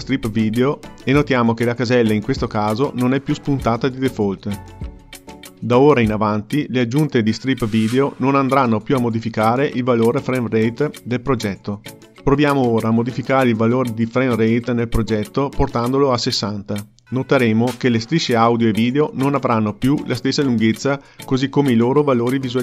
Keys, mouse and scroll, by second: 0.0-3.1 drag, 12.7 x, 16.7-19.8 drag, 21.0 ctrl+middle click, 21.9 middle click.